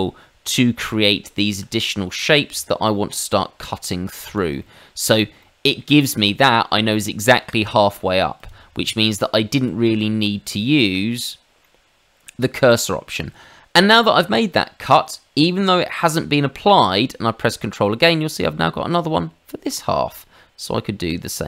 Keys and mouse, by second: 4.2 click, 4.6 middle click, 5.4 middle click, 6.4 middle click, 8.3 click, 9.5 click, 11.6 middle click, 20.1 ctrl+click, 21.0 click.